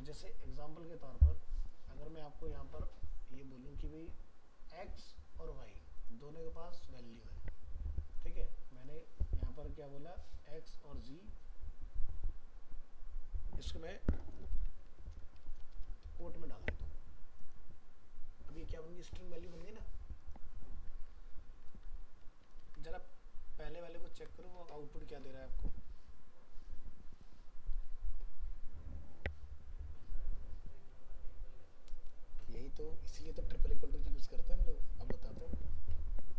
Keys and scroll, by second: 22.2 ctrl+s.